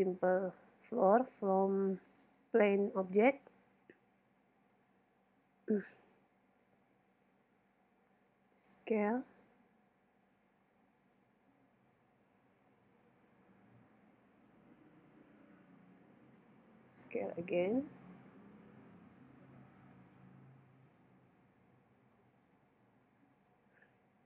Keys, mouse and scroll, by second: 4.6 shift+a, 7.4 z, 8.5 s, 10.5-12.2 drag, 12.5 shift+Tab, 13.7-15.4 drag, 16.6 s, 18.0-21.2 drag, 21.8 z, 23.6-24.2 middle drag.